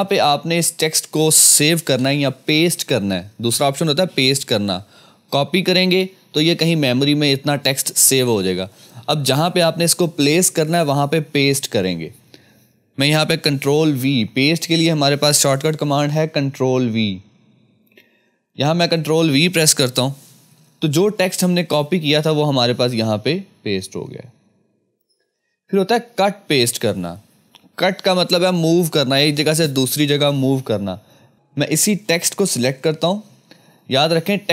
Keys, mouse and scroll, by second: 1.8 Return, 15.7 Return, 15.7 F2, 18.8 click, 20.5 ctrl+v, 26.5 ctrl+v, 26.5 click, 31.0 click, 31.1 click.